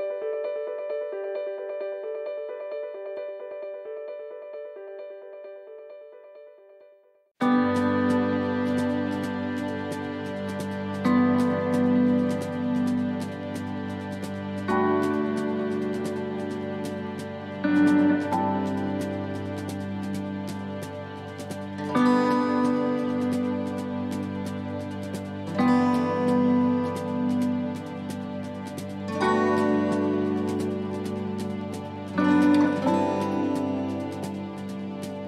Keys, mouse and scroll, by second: 0.2 click, 1.1 shift+middle click, 1.4 scroll up 5, 1.9 shift+middle click, 2.3 scroll up 1, 3.5 click, 6.6 scroll down 4, 7.0 scroll up 1, 7.7 click, 7.7 scroll up 1, 8.6 click, 9.6 right click, 10.3 shift+d, 12.2 click, 13.2 shift+middle click, 13.6-14.0 scroll up 3, 14.0 shift+middle click, 14.7 scroll down 1, 15.2 shift+middle click, 16.1 click, 17.9 ctrl+r, 19.1 ctrl+r, 20.0 shift+middle click, 20.3 scroll up 1, 20.9 middle click, 20.9 scroll up 1, 22.0 right click, 22.8 middle click, 23.6 shift+middle click, 25.0 shift+right click, 26.1 shift+middle click, 28.7 shift+right click, 30.9 shift+right click, 31.0 middle click, 31.6 shift+middle click, 33.1 shift+right click, 33.6 middle click, 34.8 click.